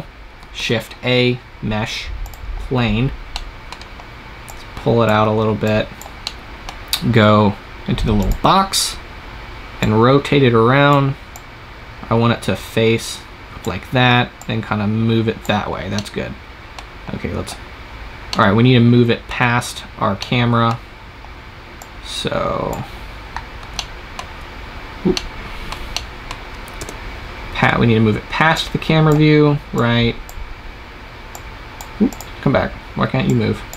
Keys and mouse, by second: 0.4 shift+a, 3.2 click, 4.3-7.5 drag, 8.1-13.0 drag, 14.3-16.3 drag, 21.7-23.6 drag, 26.6 KP_0, 28.4-33.7 drag.